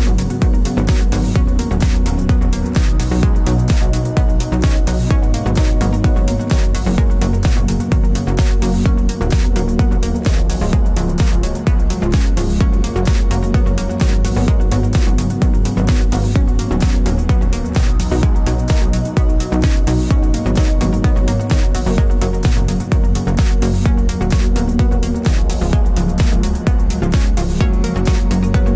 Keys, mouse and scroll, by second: 0.0 2, 0.3 click, 0.7 f, 1.0 click, 1.2 f, 1.5-5.4 middle drag, 5.4 click, 6.1 x, 7.6-9.9 middle drag, 8.1 ctrl+r, 9.9-13.2 drag, 10.1 KP_7, 13.7 f, 14.0 f, 14.1 click, 14.4 f, 14.7 click, 14.9 shift+click, 15.3 f, 15.6 ctrl+z, 15.8 click, 16.5 shift+click, 17.0-18.5 typing, 17.3 click, 18.3 click, 18.9 shift+click, 20.2 f, 20.2 click, 20.5 f, 20.8 shift+click, 21.1 f, 21.2-22.3 middle drag, 22.3 alt+click, 22.8 KP_3, 23.4-28.7 middle drag.